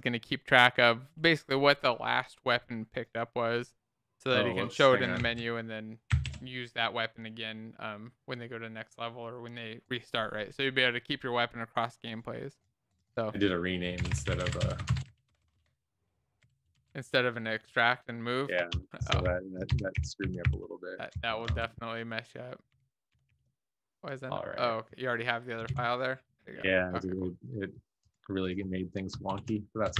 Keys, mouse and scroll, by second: 1.5 ctrl+s, 5.3 ctrl+z, 6.1 ctrl+s, 11.0 ctrl+s, 14.0-15.5 typing, 16.6-18.1 typing, 18.2 Down, 18.7 shift+Up, 19.0 shift+Up, 19.6 ctrl+x, 20.2 ctrl+z, 20.4 ctrl+s, 21.1 Down, 21.4 Up, 22.3 shift+Home, 23.1 ctrl+x, 23.5 ctrl+s, 26.2 alt+shift+f, 26.4 ctrl+s, 29.7 ctrl+., 29.8 Down, 29.9 Up.